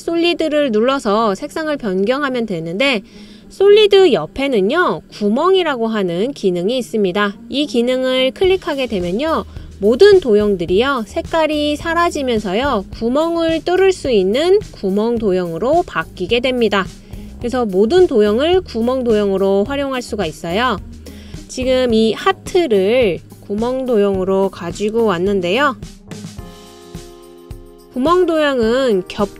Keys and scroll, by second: 25.9 super+c, 26.1 super+v.